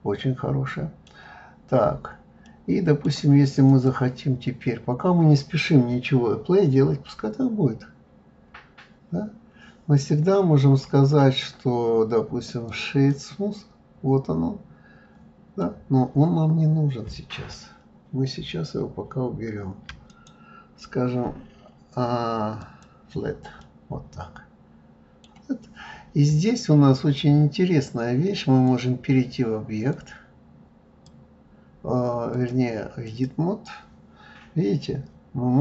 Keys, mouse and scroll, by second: 1.5-2.4 scroll up 2, 2.4-3.7 middle drag, 3.7 click, 13.1 right click, 15.6-18.6 middle drag, 20.1-23.1 right drag, 23.6-26.7 middle drag, 28.6-31.7 drag, 32.3-35.3 drag.